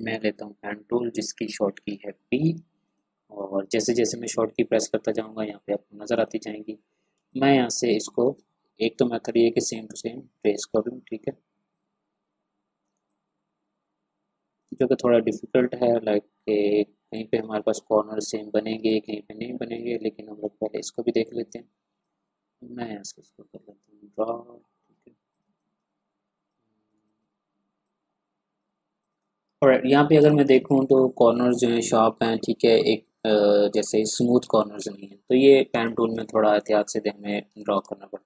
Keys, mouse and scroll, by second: 0.7 p, 2.4 click, 6.2 click, 6.5 ctrl+scroll up 1, 7.2 space, 7.3 click, 8.0 click, 8.5 ctrl+scroll up 1, 9.2 click, 13.1-14.7 drag, 14.7 space, 14.8-17.4 drag, 17.4 space, 17.5 click, 18.8 space, 18.9 click, 20.8 space, 20.9-25.3 drag, 25.4 space, 25.6 click, 26.9 space, 27.0 click, 29.5 ctrl+scroll down 1, 30.2 ctrl+space, 30.2 click, 30.6-31.0 ctrl+scroll up 1, 32.0 ctrl+scroll up 1, 34.0 click, 34.5-34.9 ctrl+scroll down 1, 35.2-35.7 ctrl+scroll down 1, 35.7 space, 35.8 click, 37.1-37.4 ctrl+scroll down 1, 37.5 space, 37.6 click.